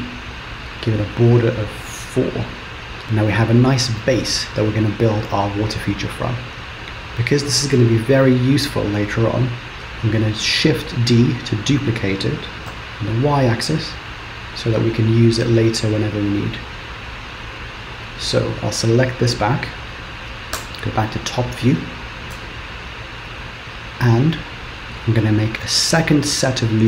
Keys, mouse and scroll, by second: 1.9-3.0 scroll down 1, 3.0 middle click, 4.1 middle click, 6.3-7.0 scroll down 1, 8.2-9.4 scroll down 3, 9.4-10.6 scroll down 1, 10.6 shift+d, 18.9 click, 20.8 KP_7, 21.4-21.9 scroll up 3, 22.4 Tab, 26.0 ctrl+r.